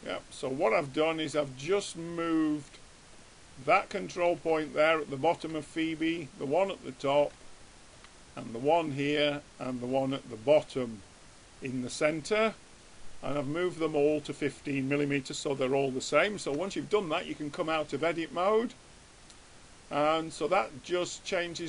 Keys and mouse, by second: 6.7-8.2 drag, 8.8-11.6 drag, 8.8 right click, 9.3 middle click, 10.6-12.0 middle drag, 10.6-11.6 right drag, 12.0 middle click, 16.7 Tab.